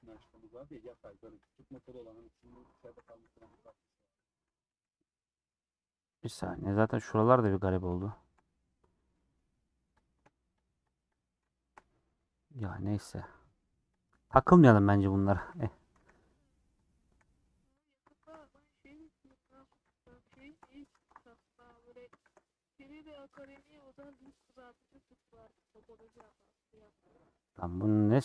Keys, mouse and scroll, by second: 0.5 middle click, 1.5 click, 1.7 g, 2.1 middle click, 2.9 g, 3.8 middle click, 4.9 click, 5.6-6.7 middle drag, 7.6 click, 7.8 scroll up 1, 8.1 shift+middle click, 8.4 scroll up 2, 8.8 scroll down 1, 9.0 middle click, 10.0 click, 10.8 shift+click, 11.4 shift+a, 11.8 scroll down 3, 12.0-14.0 middle drag, 14.0 click, 14.1-15.4 middle drag, 15.4 alt+z, 16.0 c, 16.8 click, 17.0 c, 18.2 shift+x, 18.7-19.8 middle drag, 19.8 c, 20.3 shift+x, 20.9 ctrl+z, 21.6 click, 22.5 middle click, 23.1 click, 23.4 shift+x, 24.1 shift+x, 24.8 middle click, 25.7 click, 26.0 shift+x, 26.2-28.2 middle drag.